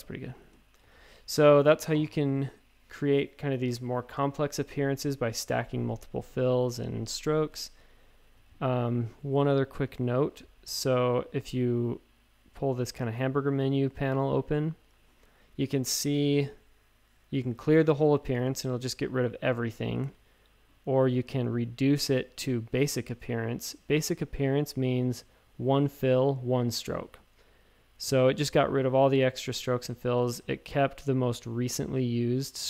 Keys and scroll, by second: 0.2 space, 0.8 v, 6.2 space, 7.5 space, 8.3 a, 20.0 super+z, 30.2 super+z.